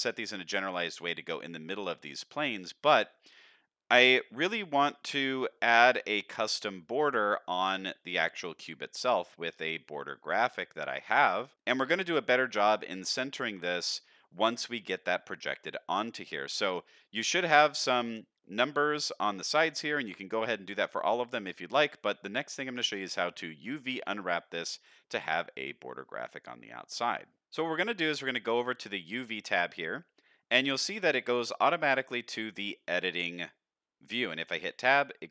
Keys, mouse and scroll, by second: 0.1 click, 0.6 middle drag, 1.4 click, 1.7 middle drag, 2.7-3.1 middle drag, 3.3 middle drag, 4.5 click, 4.9-5.4 middle drag, 8.3-8.9 middle drag, 9.1-9.6 middle drag, 9.9 middle drag, 10.6 middle drag, 11.2 middle drag, 11.9 middle drag, 13.2-13.8 middle drag, 14.3 middle drag, 15.2-16.2 middle drag, 16.4-16.7 middle drag, 17.2 click, 17.7 middle drag, 18.4 middle drag, 19.1 middle drag, 19.9-20.6 middle drag, 21.1-22.0 middle drag, 22.2-22.7 middle drag, 22.9-23.3 middle drag, 23.7 shift+middle drag, 24.7 middle drag, 29.0 click, 30.3-31.0 scroll up 3, 31.7 middle click, 32.1-32.6 scroll up 2, 32.5 middle click, 34.5 Tab.